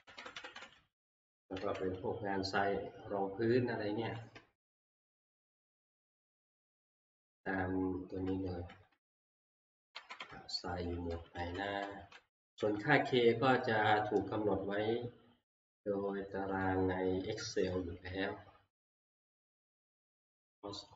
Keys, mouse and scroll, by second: 0.1 Page_Up, 0.3 Page_Up, 0.5 Page_Up, 1.3 Page_Up, 1.6 Page_Up, 4.3 Page_Up, 5.5 Page_Up, 6.1 Page_Up, 6.7 Page_Up, 8.2 Page_Up, 8.6 Page_Up, 8.9 Page_Up, 9.7 Page_Down, 11.1 Page_Up, 11.1 3, 11.4 Page_Up, 11.7 Page_Up, 12.1 Page_Up, 12.5 Page_Up, 16.6-18.5 drag.